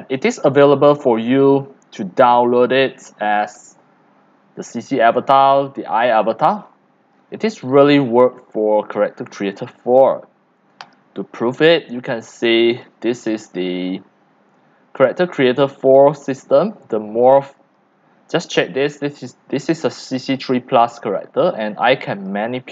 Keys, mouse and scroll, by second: 0.2 scroll, 0.4 scroll, 1.3 click, 1.6 scroll, 1.8 scroll down 8, 1.9 scroll, 2.6 click, 2.8-4.9 typing, 3.2 click, 4.6 drag, 4.8 middle click, 4.8 scroll down 1, 5.0 scroll down 1, 5.1 scroll down 1, 5.3 middle click, 5.3-5.7 scroll up 1, 5.7 scroll, 5.9 scroll, 6.7 c, 7.2 click, 8.0 x, 8.8 click, 8.9 scroll down 6, 10.4-10.9 scroll up 6, 10.9 click, 11.6-12.3 scroll up 6, 12.3 x, 12.7 c, 12.8-16.9 drag, 17.6 click, 19.1 click, 21.6 click, 22.4-22.7 drag.